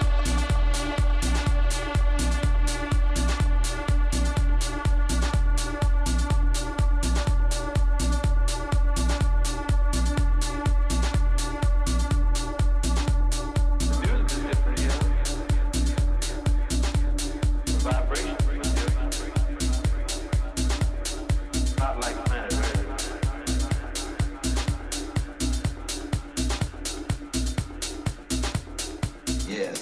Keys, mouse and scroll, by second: 1.3-3.0 drag, 4.5 middle click, 5.3 a, 5.7-8.3 right drag, 7.3-8.9 drag, 8.9-16.9 middle drag, 12.8 a, 15.8-19.9 right drag, 19.9-21.1 middle drag, 20.1 right click, 21.1 right click, 21.5-23.3 drag, 23.7 a, 24.5-27.6 right drag, 26.5-28.3 drag, 28.3 a, 28.8-29.8 right drag.